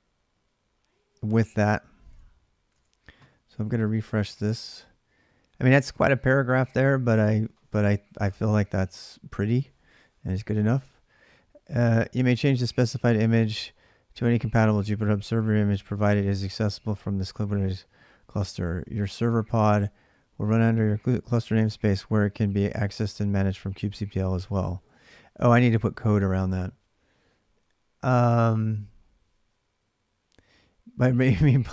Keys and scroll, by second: 1.9 alt+Tab.